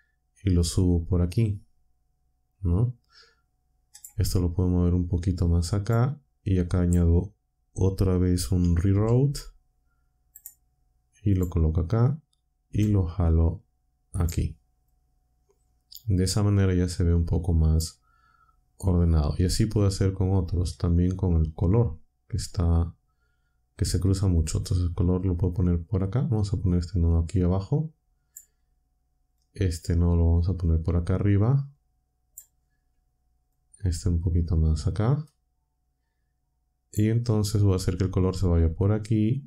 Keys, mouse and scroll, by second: 3.9 click, 4.9-6.0 drag, 8.9 shift+a, 10.3 click, 11.3 click, 12.6 g, 14.1 click, 14.8-17.9 drag, 20.7-28.5 drag, 29.3-32.4 drag, 33.5-37.1 drag.